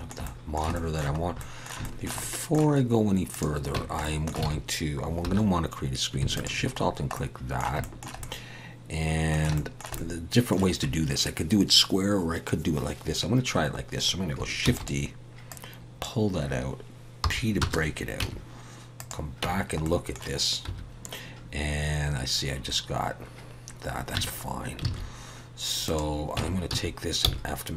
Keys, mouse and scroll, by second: 0.2 middle click, 0.7 shift+middle click, 1.1-1.5 scroll up 2, 1.4 middle click, 1.8 shift+middle click, 2.2 middle click, 3.3 click, 3.7 Tab, 4.0 middle click, 4.4 alt+a, 5.2 2, 6.3 alt+shift+click, 6.9 scroll down 2, 7.1 middle click, 7.8 shift+middle click, 8.2 middle click, 9.5 shift+middle click, 9.9 middle click, 14.6 shift+d, 15.5 click, 17.4 p, 18.2 Tab, 19.0 click, 19.4 Tab, 19.9 middle click, 20.7 1, 24.1 Tab, 24.5-24.8 scroll down 1, 24.9 alt+a, 25.8 click, 26.4 Tab, 26.7 a, 27.3 f.